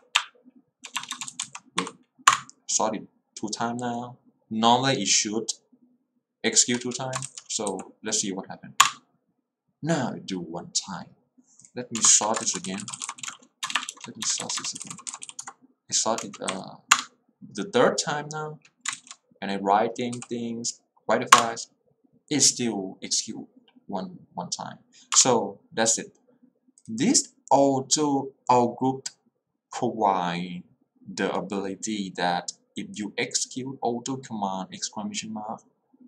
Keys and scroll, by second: 0.0-0.2 typing, 1.9 Up, 2.4 Return, 7.7 w, 8.8 Return, 12.1 Return, 12.4-13.8 typing, 14.9 u, 15.2 c, 15.4 Tab, 16.3 space, 16.5 Up, 17.1 Return, 20.2 w, 21.5 Return.